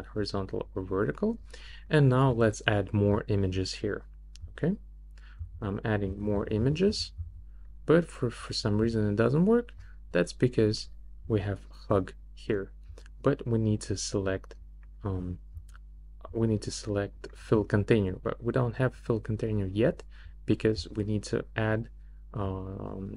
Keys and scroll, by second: 5.4 super+d, 6.3 super+d.